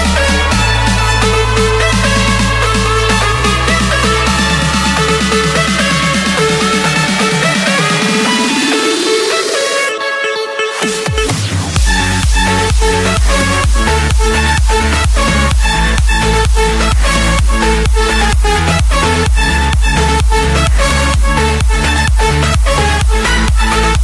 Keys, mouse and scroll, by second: 3.4-4.5 drag, 4.8-5.9 drag, 7.2-8.2 drag, 9.4-10.5 drag, 10.6-11.7 typing, 12.2 Return, 14.2 typing, 15.0 Return, 16.6-18.0 typing, 18.2 Return, 19.8 click, 21.2-22.8 typing, 21.7 Return, 23.2 Return, 23.6 Return.